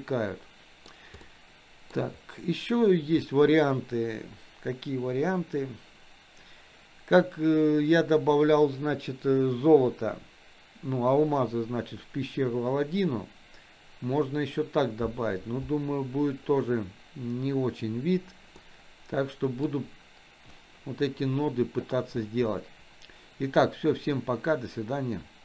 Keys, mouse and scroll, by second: 1.2-2.0 middle drag, 18.6-19.7 middle drag.